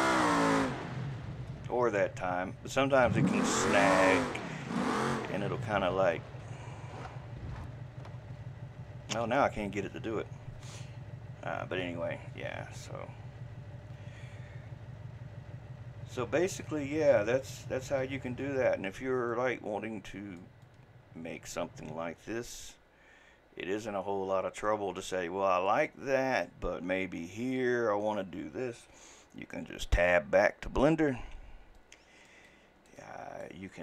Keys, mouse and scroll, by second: 31.8-32.9 right drag, 33.0-33.7 middle drag, 33.7 scroll up 2.